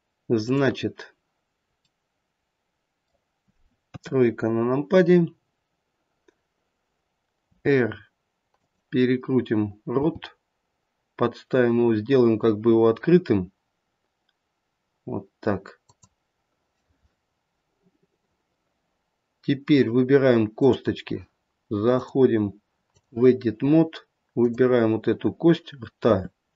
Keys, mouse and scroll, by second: 0.4 click, 1.9 middle click, 2.9 middle click, 3.8 KP_3, 7.5 r, 10.0 g, 20.6 click, 21.9 click, 24.3 click, 26.1 r.